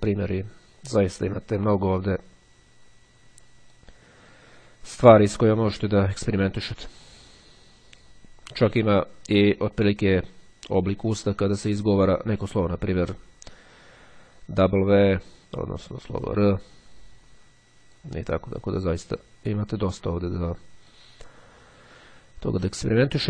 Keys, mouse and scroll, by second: 2.1-4.3 drag, 10.9-15.8 drag, 16.3-18.5 drag, 19.9-21.3 drag.